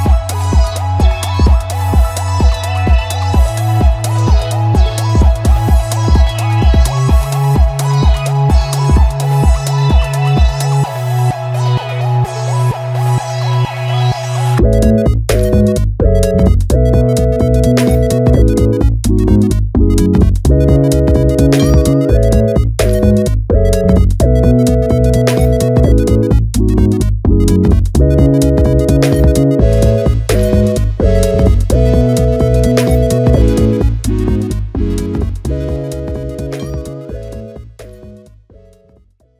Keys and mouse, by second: 38.3-39.3 drag.